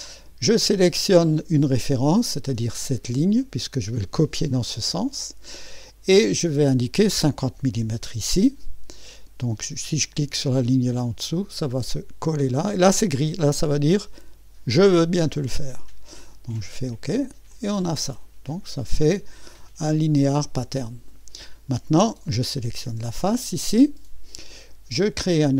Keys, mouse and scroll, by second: 1.8 click, 3.2 click, 6.1 click, 7.6-8.3 typing, 10.9 click, 12.8-13.5 scroll up 1, 13.5 scroll up 1, 13.6-14.7 middle drag, 16.6 click, 17.5 click, 20.7-21.7 drag, 21.7 typing, 22.6 click.